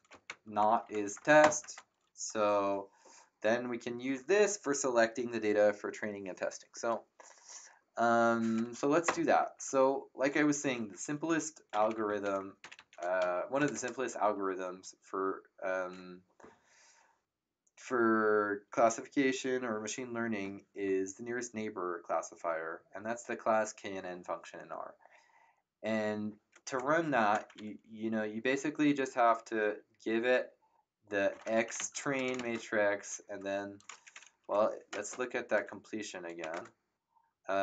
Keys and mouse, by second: 0.0-1.4 typing, 9.0 KP_Enter, 11.0-13.6 typing, 27.3 shift+9, 31.0-32.8 typing, 34.4 Delete, 34.4 KP_Decimal, 34.9 space, 35.3 BackSpace, 36.4 space, 36.5 Tab.